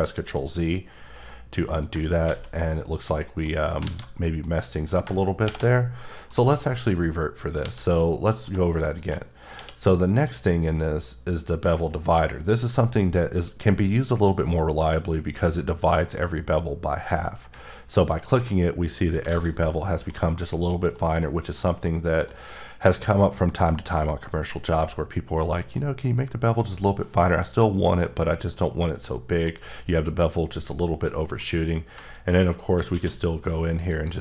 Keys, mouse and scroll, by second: 1.3 middle click, 2.2 ctrl+z, 2.7 middle click, 3.1 middle click, 3.8 alt+a, 4.2 middle click, 5.4 shift+o, 6.3 click, 7.6 a, 8.1 middle click, 8.8 shift+click, 9.6 q, 18.1 ctrl+click, 19.3 alt+a, 19.7 middle click, 20.9 middle click, 22.5 middle click, 23.3-23.8 scroll down 1, 25.8 middle click, 27.1 scroll up 3, 28.3 scroll down 1, 28.6 middle click, 30.1 middle click, 31.4 click, 32.9 q, 33.9-34.2 drag.